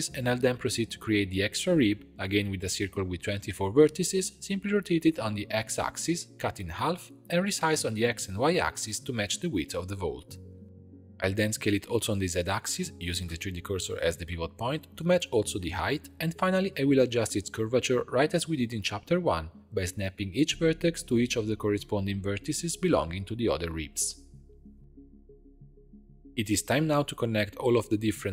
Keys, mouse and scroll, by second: 0.2 shift+a, 2.1-4.3 drag, 4.3 Tab, 4.9 r, 6.0 b, 6.1 x, 6.8 click, 6.9 s, 11.3 shift+middle click, 12.1-14.1 drag, 14.1 s, 17.1 scroll up 1, 17.1 click, 17.6 g, 18.3 scroll up 1, 18.3 shift+middle click, 18.9 click, 19.0 g, 19.8 shift+middle click, 20.4 click, 20.6 g, 21.9 shift+middle click, 22.7 click, 22.9 g, 23.9 shift+middle click, 24.6 click, 24.8 g, 26.1 shift+click, 26.7 f, 27.4 click, 27.8-28.3 typing.